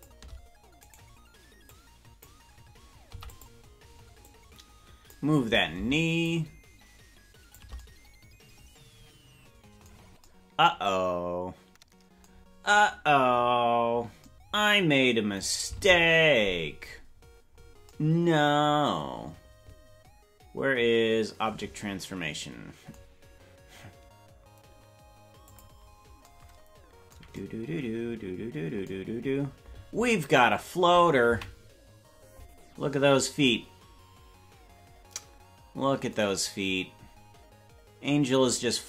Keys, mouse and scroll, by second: 1.7 click, 1.7 right click, 3.0 i, 4.3 click, 6.2-7.6 shift+drag, 13.5-14.2 scroll down 9, 15.8 ctrl+Tab, 15.8-16.9 scroll down 1, 17.0-17.7 scroll up 9, 17.7 scroll down 1, 25.5 click.